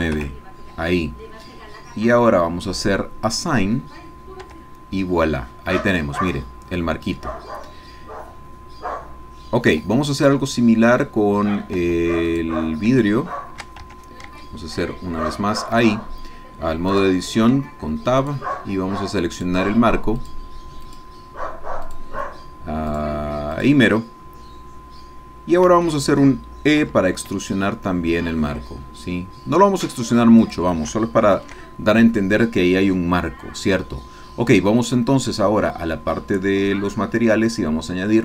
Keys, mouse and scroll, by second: 0.2 KP_Enter, 1.8-2.4 scroll up 2, 3.2 click, 4.4 Tab, 5.1-7.3 drag, 8.3-9.1 scroll down 1, 9.1 scroll down 1, 9.3-9.7 scroll up 1, 9.9 Tab, 10.1 click, 11.8 Tab, 12.3 click, 13.1 shift+click, 13.2 shift+middle click, 13.9 shift+Tab, 14.4 shift+middle click, 14.5-15.8 shift+drag, 16.2 click, 17.1 click, 18.2 shift+click, 19.5 shift+click, 20.2 shift+click, 20.8 shift+click, 21.8 shift+click, 22.9 shift+click, 23.5 shift+click, 24.0-25.8 shift+drag, 25.9 shift+click, 26.8 e, 30.6 shift+click, 30.9 ctrl+shift+click, 31.2 ctrl+shift+KP_Add, 36.5-36.9 scroll up 2.